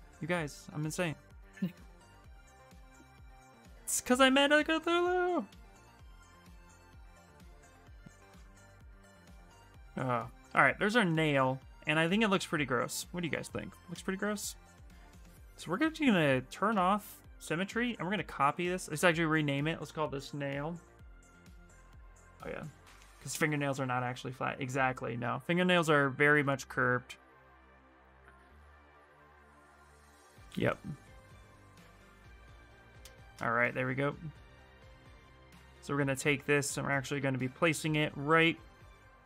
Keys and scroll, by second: 16.4 x, 19.6-20.7 typing, 20.9 Return.